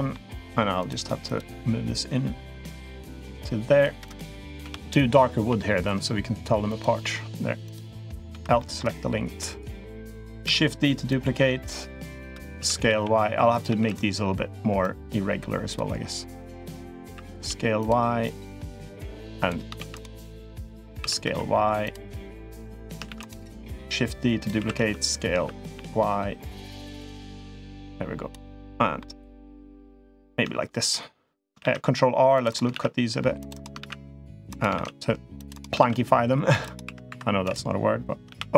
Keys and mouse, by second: 0.6 click, 1.0 click, 2.8-3.6 drag, 4.4 l, 5.2 g, 7.4 click, 8.1 l, 8.3 middle click, 9.1-9.8 middle drag, 10.2 shift+d, 10.8-12.0 drag, 12.3 s, 13.5 shift+d, 14.6-15.5 drag, 16.8 s, 18.0-19.2 drag, 19.5 shift+d, 20.1 click, 20.7 s, 22.1 click, 22.8 shift+d, 23.4-24.3 drag, 24.3 s, 27.4 click, 28.3 middle click, 29.4-30.0 middle drag, 31.4 ctrl+r, 32.6 ctrl+r, 34.6 ctrl+r, 35.6 ctrl+r, 36.7 3, 36.9 2, 37.2 click, 38.1 o.